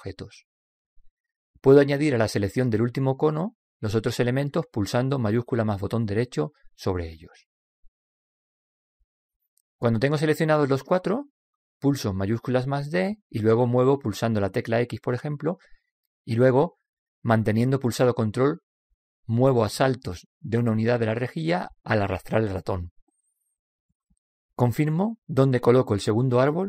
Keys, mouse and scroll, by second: 6.2-10.2 shift+right drag, 13.2 shift+d.